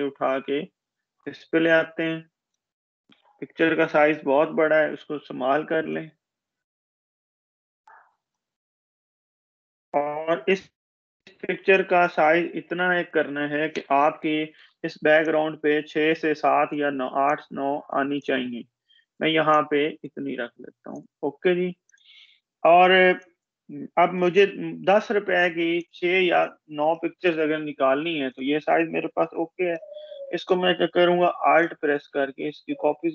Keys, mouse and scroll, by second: 2.8 ctrl+-, 5.7-7.7 drag, 12.3 ctrl+=, 14.5-16.5 drag, 24.1 Up, 25.5 click, 29.3 Up, 31.2-33.1 alt+drag.